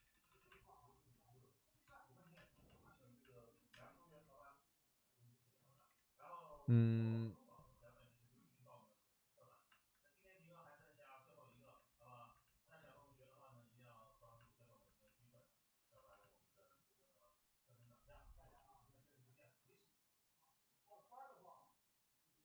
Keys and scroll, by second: 0.0 d, 0.2 d, 2.3 space, 3.7 space, 5.7 ctrl+z, 12.8 ctrl+z, 18.1 ctrl+z, 18.3 ctrl+z.